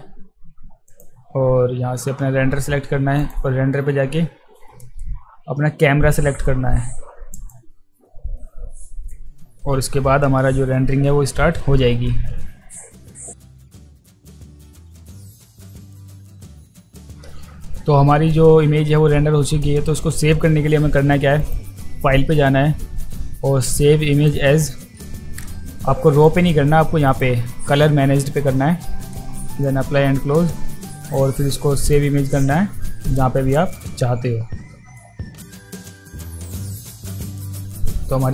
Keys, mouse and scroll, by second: 0.9 click, 3.2 click, 7.3 click, 21.4 click, 24.1 click, 26.1 click, 27.0 click, 29.5 click, 31.0 click, 31.8 click, 35.0 click, 35.3 ctrl+v, 35.5 click, 35.6 click, 36.1 click, 36.3 click, 36.4 click, 36.9 e, 37.1 click, 37.2 click, 37.4 click.